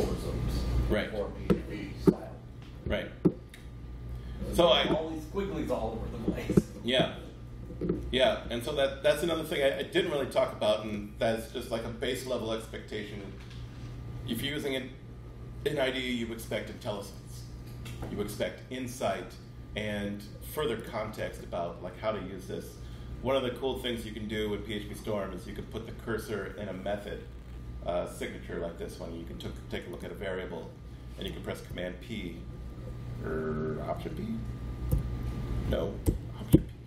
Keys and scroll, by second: 31.6 super+p, 34.8 alt+p, 35.9 BackSpace, 36.4 ctrl+p.